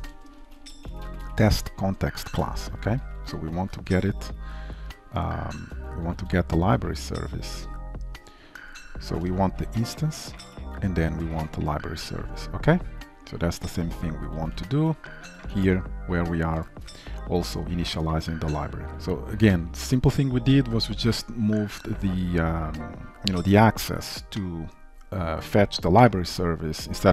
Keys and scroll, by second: 3.6 Return, 5.6 ctrl+w, 8.7 ctrl+shift+Right, 10.3 Return, 14.4 ctrl+w, 15.6 ctrl+c, 17.0 ctrl+w, 17.5 ctrl+v, 18.9 ctrl+s.